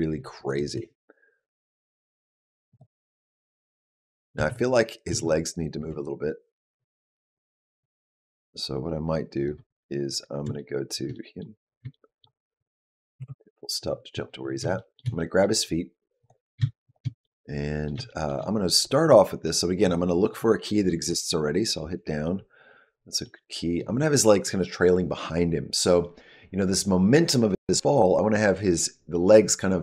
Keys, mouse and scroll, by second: 0.4 click, 0.7 space, 2.7 click, 4.3 space, 4.6 click, 5.0 space, 5.7 space, 6.0 click, 10.4 shift+middle click, 11.0 middle click, 11.8 shift+middle click, 13.0 KP_Decimal, 13.7-14.5 scroll down 6, 14.6 shift+middle click, 15.0 middle click, 16.1 click, 16.7 shift+click, 17.1 middle click, 17.9 shift+middle click, 21.0 Down, 23.1 middle click.